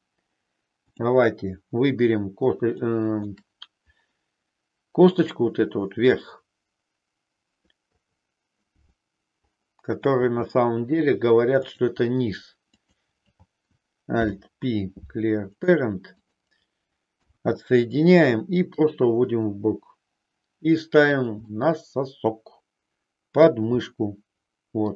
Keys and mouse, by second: 0.8 click, 2.7 shift+middle click, 7.9 KP_3, 10.2 e, 12.7 click, 14.0 alt+p, 17.0 KP_1, 18.8-21.2 drag, 21.4-23.6 middle drag, 23.8-24.9 middle drag.